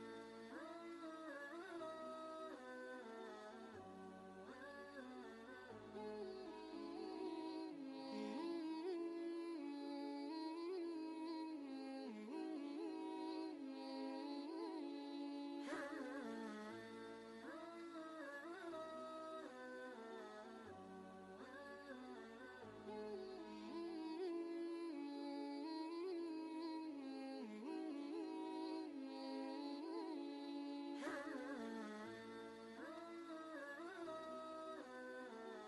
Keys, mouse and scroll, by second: 1.1 ctrl+space, 1.2-12.6 ctrl+drag, 12.9 ctrl+space, 13.0 ctrl+click, 13.4 ctrl+space, 13.8 click, 14.3 space, 15.6 click, 15.6 click, 17.7 typing, 19.1 click, 22.8 click, 22.9 click, 27.2 click, 30.2 click, 32.5 ctrl+space, 32.7 ctrl+click, 33.0 ctrl+space.